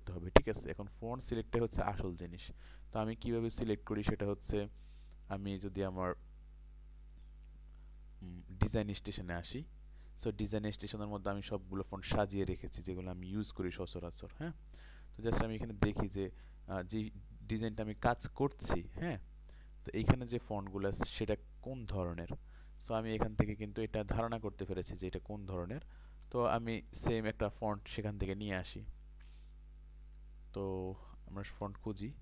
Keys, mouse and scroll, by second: 15.3 ctrl+click, 15.8 click, 19.5 ctrl+space, 19.9 click, 20.9 ctrl+space, 22.2 click, 22.8 ctrl+space, 23.0 ctrl+click, 23.9-25.5 ctrl+drag, 26.9 ctrl+click, 28.7 click, 29.5 ctrl+click, 32.0 click.